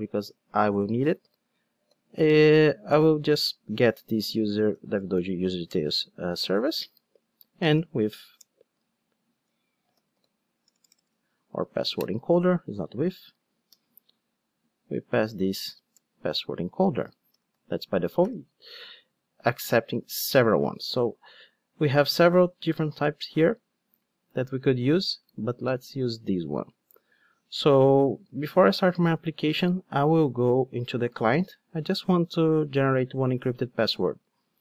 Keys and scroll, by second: 5.7 Return, 8.9 super+z, 12.0 Return, 18.2 alt+super+l, 20.3 super+b, 28.6 ctrl+Tab.